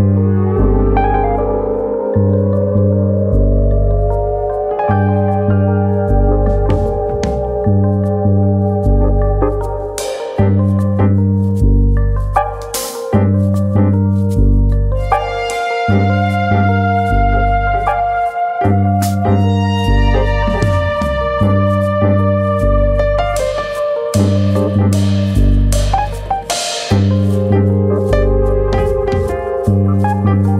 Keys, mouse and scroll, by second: 0.5 click, 1.6 click, 8.0 click, 8.9 click, 11.1 click, 11.9 ctrl+z, 12.1-12.7 scroll down 2, 12.7 click, 13.4 click, 14.5 click, 15.8 click, 17.8 click, 18.5-19.5 scroll down 1, 19.5 click, 20.4 click, 23.0 shift+middle click, 23.8 ctrl+click, 26.3 scroll down 2, 26.5 shift+middle click, 27.2 ctrl+click, 28.9 click, 29.4 shift+d, 30.4-30.5 scroll up 1.